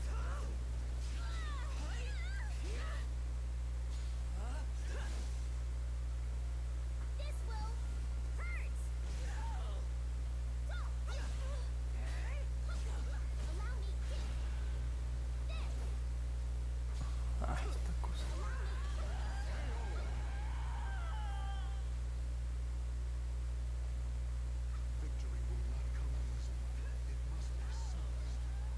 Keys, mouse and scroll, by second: 2.2 click, 5.8-15.8 drag, 16.5 click, 21.2-25.3 drag, 27.1 click, 27.6 click, 28.0 click, 28.5 click.